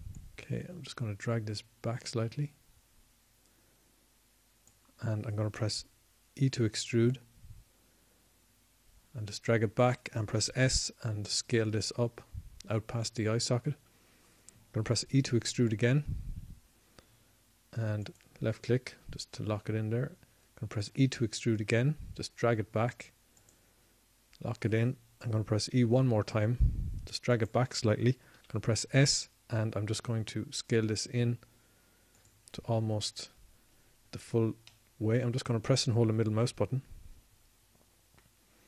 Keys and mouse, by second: 3.5 n, 10.2 e, 14.2 s, 18.8 e, 22.4-23.5 drag, 24.7 e, 27.3-29.6 drag, 29.6 e, 31.3-33.0 drag, 32.2 s, 36.5-37.7 drag, 37.9 click, 38.5 click, 38.6 middle click.